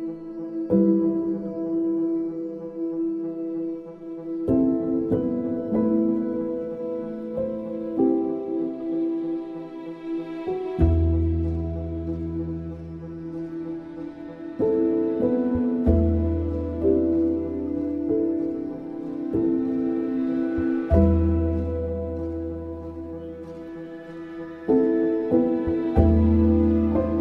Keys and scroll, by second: 8.1 ctrl+c, 8.7 ctrl+c.